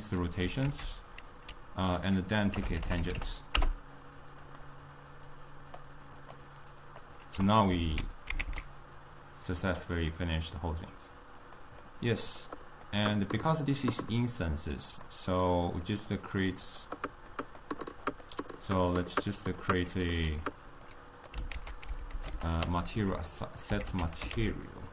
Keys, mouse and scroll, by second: 0.8 ctrl+a, 5.4-6.4 drag, 6.7 click, 7.4 g, 11.9-15.0 middle drag, 15.0 click, 16.0 click, 16.9 click, 17.6-21.0 middle drag, 21.0 click, 21.6 ctrl+a, 22.8 BackSpace, 23.0 BackSpace.